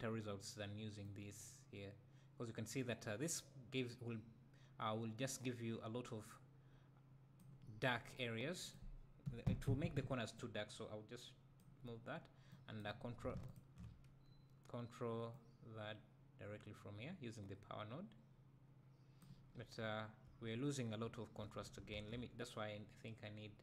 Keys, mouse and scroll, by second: 9.3 Delete, 10.4-12.6 drag, 13.5 ctrl+shift+click, 15.4-19.2 drag, 19.5 scroll down 2, 19.8 `, 20.4 scroll up 2, 21.1 `.